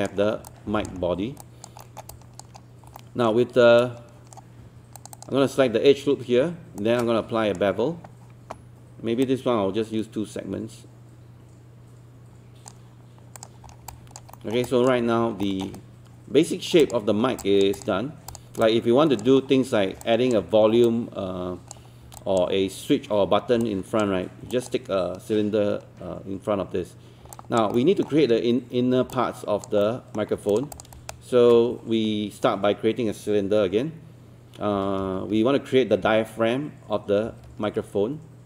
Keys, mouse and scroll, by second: 0.2 scroll up 1, 0.5 alt+click, 1.1 scroll up 1, 1.4 alt+click, 1.8 alt+middle click, 2.1 alt+click, 2.6 scroll up 1, 3.0 alt+middle click, 3.8-4.8 right drag, 4.9 click, 6.8-7.8 shift+right drag, 9.3-12.8 drag, 13.7 scroll down 1, 13.9 alt+click, 14.3 alt+middle click, 14.4 alt+scroll down 1, 14.7 alt+click, 15.5 alt+middle click, 15.8-16.9 right drag, 16.9 click, 17.2 scroll down 1, 17.4 alt+click, 18.8 alt+click, 19.4-19.9 scroll up 1, 20.0 alt+click, 20.9 alt+click, 21.9 scroll up 1, 22.2 alt+click, 23.8 alt+click, 24.5 alt+click, 27.3 alt+click, 27.7 alt+middle click, 28.8 scroll down 1, 29.1 alt+click, 29.8 alt+middle click, 30.5 click, 31.1 shift+right click, 34.5-36.1 typing.